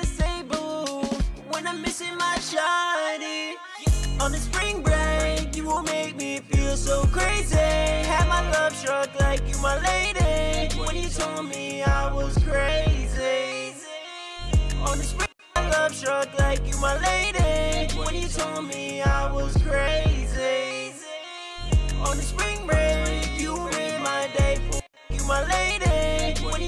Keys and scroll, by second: 1.6 F4, 6.2 super+s, 8.7 ctrl+shift+Page_Down, 9.5 ctrl+shift+Page_Up, 9.9 super+s, 12.3 e, 14.0 F1, 14.2 F2, 14.6 space, 14.7 space.